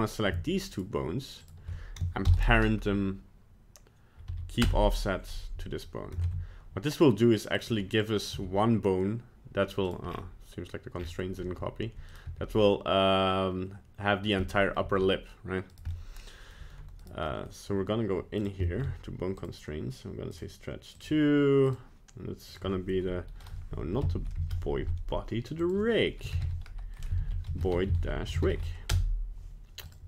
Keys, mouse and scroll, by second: 0.7 shift+right click, 1.4 shift+right click, 2.2 ctrl+p, 6.2 ctrl+Tab, 8.0 right click, 8.3 r, 10.1 scroll down 5, 11.0 scroll up 6, 11.4 r, 12.3 g, 14.4 middle click, 14.8 g, 15.9 middle click, 17.0 right click, 17.3 middle click, 17.4 middle click, 18.4 click, 18.6 shift+middle click, 18.8 shift+middle click, 19.3 click, 20.9 click, 22.5 click, 25.6 click, 29.8 click.